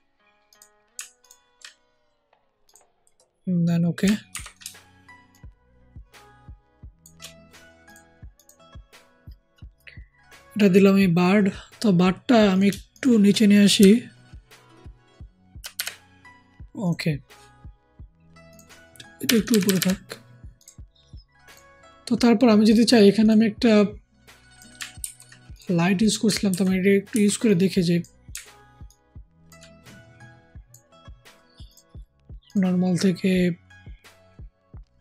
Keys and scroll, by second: 4.2 ctrl+t, 13.7 shift+Down, 15.7 shift+Down, 19.3 Up, 24.9 ctrl+c, 26.4 ctrl+v, 27.0 ctrl+t.